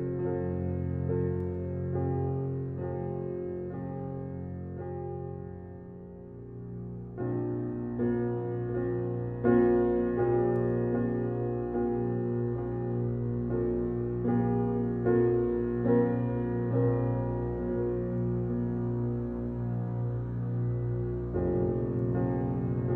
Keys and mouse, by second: 2.6 click, 3.8 click, 4.2 click, 5.3 click, 6.3 click, 6.8 click, 7.4 click, 8.5 space, 9.0 space, 9.1 space, 9.7 space, 11.7 click, 13.2 click, 16.1 click, 17.4 click, 18.4 click, 19.8 Escape, 20.6 click, 21.6 click.